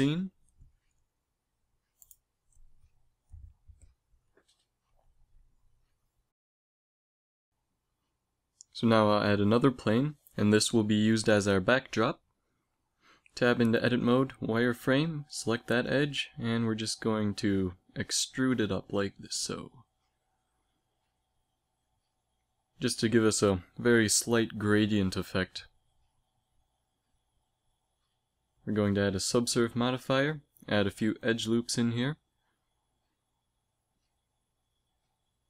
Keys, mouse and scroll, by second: 0.8 middle click, 1.3 shift+z, 7.4 z, 7.7 z, 9.6 shift+a, 11.2 s, 13.9 KP_3, 14.4 Tab, 15.6-18.2 typing, 19.3 e, 20.9 e, 22.1 e, 23.6 e, 25.7 Tab, 27.0 z, 29.7 ctrl+2, 30.2 Tab, 31.0 ctrl+r, 33.1 ctrl+r, 35.3 ctrl+r.